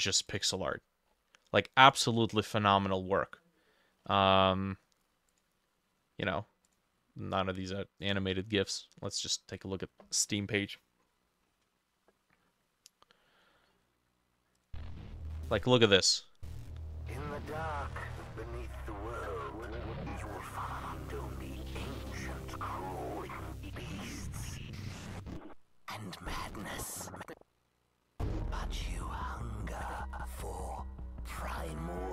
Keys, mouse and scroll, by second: 0.5-2.1 drag, 1.1-1.4 scroll down 5, 4.0-4.8 scroll up 6, 4.8 scroll up 1.